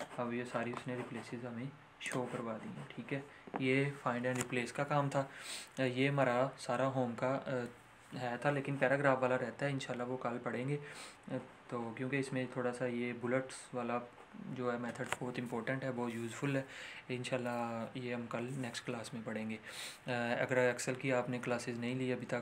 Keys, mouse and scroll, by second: 0.7 scroll up 1, 2.2 click.